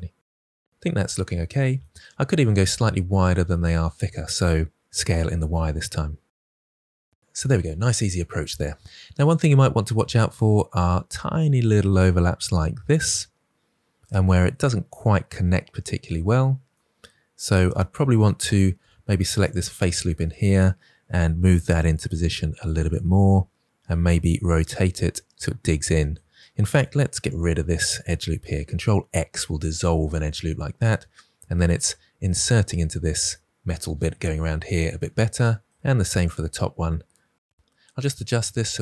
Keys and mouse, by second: 0.2 Tab, 4.8 Tab, 5.1 s, 5.1 y, 6.0 click, 6.5 middle click, 18.7 3, 19.3 click, 21.0 g, 21.3 z, 22.7 click, 24.1 r, 24.7 click, 24.8 g, 25.1 click, 26.7 2, 28.4 ctrl+x, 37.4 alt+z, 37.7 alt+z, 37.9 g, 38.5 click.